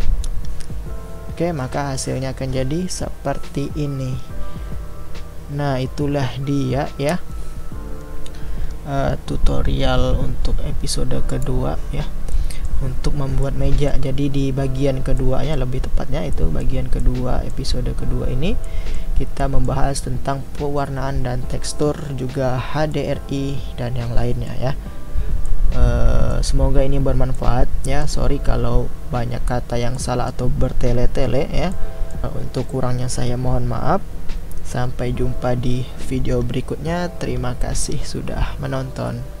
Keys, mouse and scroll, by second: 12.3-13.0 middle drag, 13.0 scroll down 2, 13.5-14.7 middle drag, 14.7-15.2 scroll up 2, 15.2-15.9 middle drag, 15.9-16.5 scroll down 1, 16.5-25.0 middle drag, 25.0-25.4 scroll down 2, 25.4-26.8 middle drag, 26.8-27.4 scroll up 2, 27.4-39.4 middle drag.